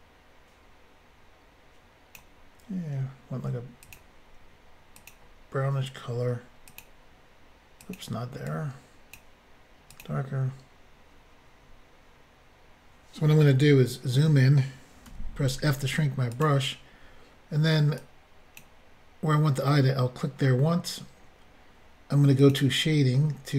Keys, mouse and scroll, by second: 3.9 click, 3.9 click, 5.0 click, 5.1 click, 6.7 click, 6.8 click, 7.8 click, 7.9 click, 8.5 click, 9.9 click, 10.0 click, 13.8-14.1 scroll up 1, 15.1 f, 16.3 click, 16.4 click, 18.0 click, 22.4 click, 22.5 click.